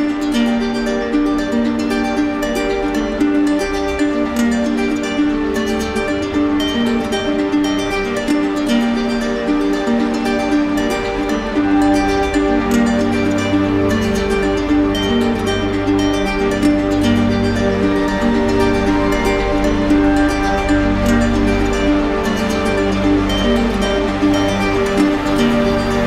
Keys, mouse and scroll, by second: 0.3 shift+right click, 3.7 click, 5.0 click, 7.3 click, 7.9 ctrl+z, 8.8 right click, 9.5-10.6 typing, 11.3-12.4 right drag, 13.3-14.3 right drag, 14.8 d, 15.7 right click, 16.4 right click, 17.3 right click, 17.8 shift+right click, 18.7 right click, 19.4 right click, 20.7 alt+right click, 21.3 alt+right click, 22.2 right click, 22.6 shift+right click, 24.0 alt+right click.